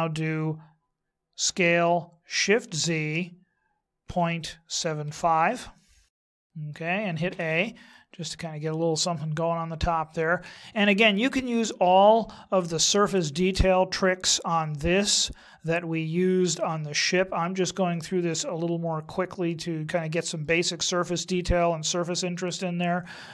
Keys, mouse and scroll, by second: 1.4 s, 6.2 middle click, 7.3 a, 7.9 middle click, 16.9 middle click.